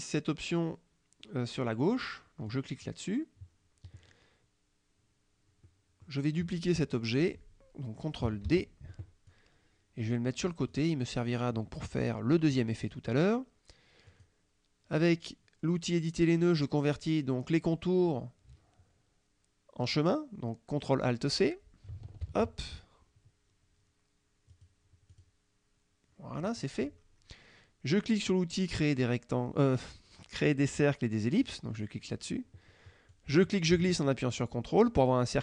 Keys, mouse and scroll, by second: 2.5 click, 5.7 click, 8.5 ctrl+d, 9.3 click, 10.8 click, 12.1 click, 12.9 click, 14.2 click, 22.3 ctrl+alt+c, 24.6 click, 25.2 click, 31.5 click, 33.2-35.4 drag.